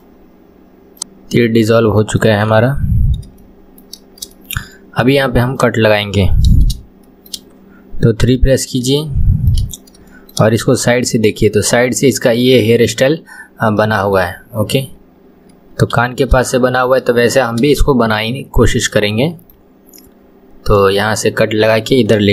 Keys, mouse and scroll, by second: 0.0-1.0 right drag, 1.0-2.5 middle drag, 2.5 KP_1, 3.1 scroll down 1, 3.4-5.6 shift+middle drag, 5.6 click, 7.1-8.2 shift+middle drag, 8.2 KP_3, 9.0-9.7 shift+middle drag, 9.7-10.1 scroll down 1, 10.1 shift+middle click, 10.6 KP_1, 13.8-16.0 middle drag, 16.0 KP_1, 16.5-17.2 shift+middle drag, 17.2-17.7 scroll up 2, 17.7-22.0 shift+middle drag.